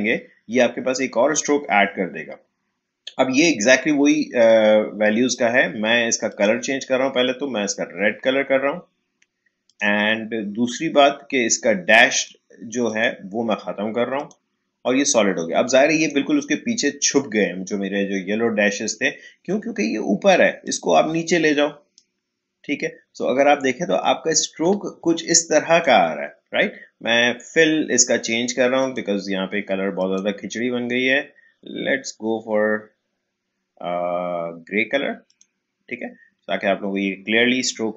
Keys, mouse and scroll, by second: 6.2 click, 9.6 click, 12.1 click, 20.6-23.5 drag, 23.5-23.9 alt+scroll up 1, 25.0 space, 25.2 click, 25.9 space, 28.8 click, 35.2 click, 36.9-37.3 alt+scroll down 1.